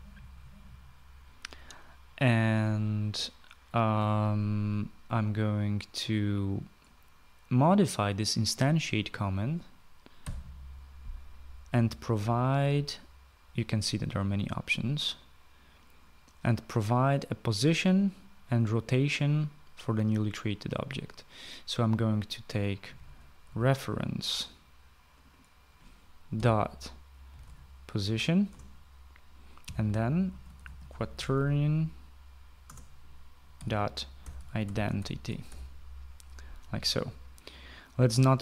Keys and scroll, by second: 10.7 ,, 23.3-24.4 typing, 26.6-28.4 typing, 28.9 Return, 29.9-32.5 typing, 33.1 Return, 33.8-36.5 typing.